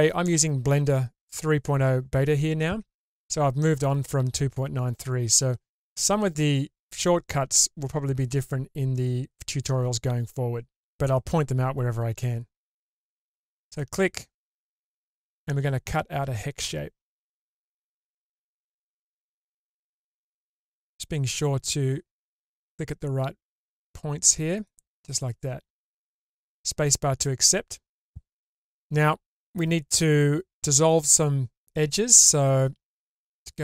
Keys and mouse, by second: 33.0-33.6 alt+middle drag.